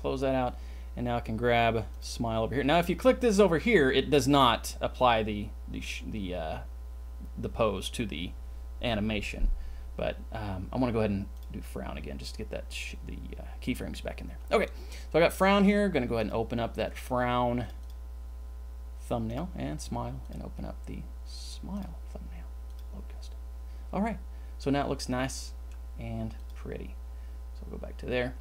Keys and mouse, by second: 1.9 click, 11.3 click, 16.1 click, 19.2 click, 25.4 click.